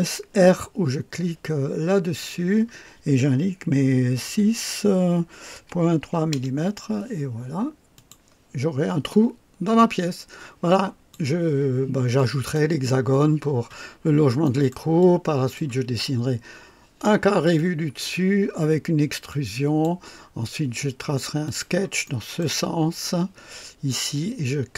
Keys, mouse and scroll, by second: 2.2 r, 4.2 KP_6, 5.7-10.1 typing, 6.5 KP_Enter, 7.9 click, 9.1-11.3 drag, 12.1-12.7 drag, 13.8-14.2 scroll down 1, 14.4 right click, 15.0-15.7 drag, 16.2-18.2 typing, 17.5-18.2 drag, 19.3-20.0 drag, 21.4 click, 22.0-22.6 right drag, 23.7-24.4 typing.